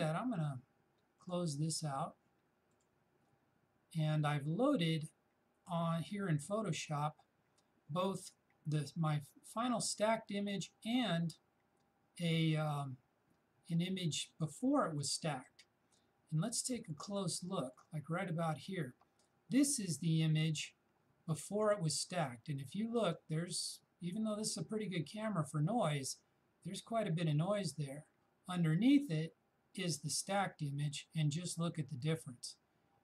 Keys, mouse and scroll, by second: 1.3 shift+click, 16.5 shift+click, 29.0 shift+click.